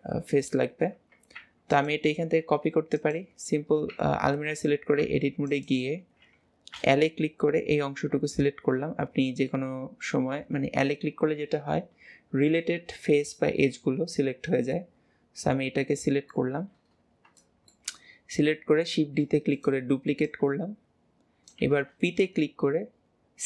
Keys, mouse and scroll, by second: 1.8 click, 3.0 click, 5.5 click, 7.6-8.4 scroll up 3, 8.4 scroll up 1, 9.1-9.8 scroll down 7, 9.8 scroll up 1, 10.2 scroll down 1, 10.2 scroll up 1, 10.3 scroll down 3, 14.8 middle click, 15.4 middle click, 16.6 middle click, 19.0-23.4 middle drag, 20.3 click.